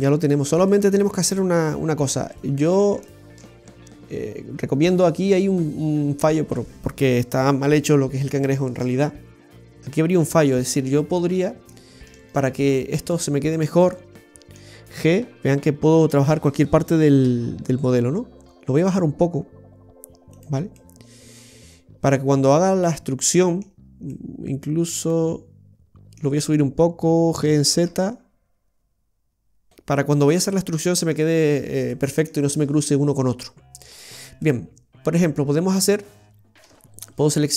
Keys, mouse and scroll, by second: 0.6 middle click, 1.5 shift+middle click, 1.6-2.3 scroll up 2, 2.3 middle click, 3.4 shift+middle click, 3.6 scroll up 1, 4.5 scroll up 1, 10.5 right click, 11.1 middle click, 12.1 shift+right click, 12.6-13.2 scroll down 1, 13.4-13.8 scroll down 1, 13.9 middle click, 16.0 g, 20.7 middle click, 24.0 middle click, 27.3 g, 29.7 middle click, 29.7-30.1 scroll up 2, 31.4 scroll down 1, 31.8 middle click, 33.3 middle click, 33.9-34.3 scroll down 2, 34.3 middle click, 36.6 a.